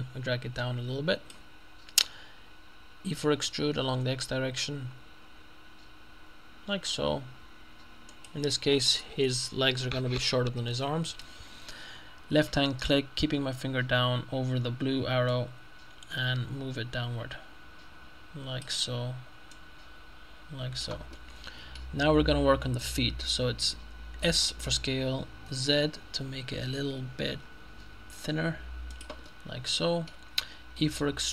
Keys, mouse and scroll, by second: 3.2 e, 3.8 x, 8.2 click, 15.7-19.2 drag, 19.2 middle click, 19.6-21.4 drag, 21.2 middle click, 22.1-23.2 scroll up 2, 24.3 s, 25.6 z, 29.0 click, 30.8 e.